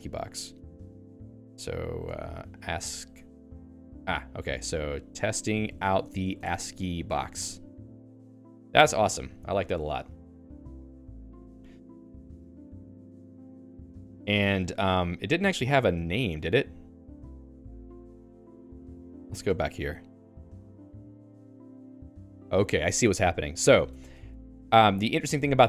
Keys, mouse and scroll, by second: 0.5 Return, 1.3-3.2 typing, 2.0 Return, 4.8-9.0 typing, 15.7 j, 15.8 Escape, 16.1 o, 16.2 Return, 18.1 Return, 18.7 Escape, 19.4 Return, 23.9 Escape, 24.0-25.2 typing.